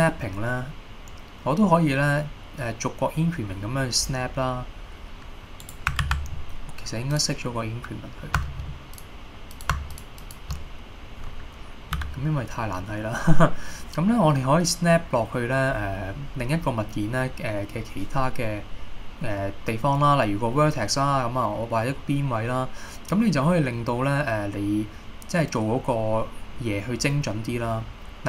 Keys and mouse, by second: 5.7 right click, 6.2 ctrl+z, 7.2-10.8 drag, 12.1 e.